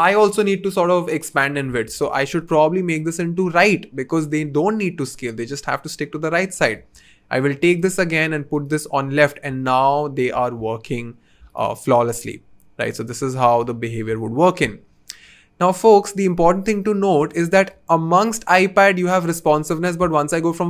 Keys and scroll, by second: 17.0 v.